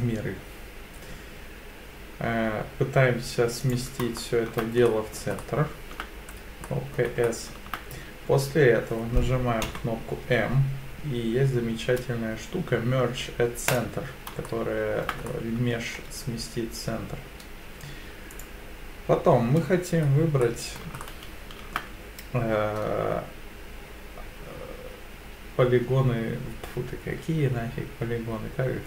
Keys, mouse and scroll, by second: 3.6 click, 4.2 shift+middle click, 4.9 middle click, 5.4 shift+middle click, 6.3-6.6 scroll up 1, 6.7 middle click, 7.2-7.7 shift+scroll up 1, 9.7 m, 14.5 shift+middle click, 15.3 middle click, 18.3 click, 20.4 middle click, 21.0 shift+middle click.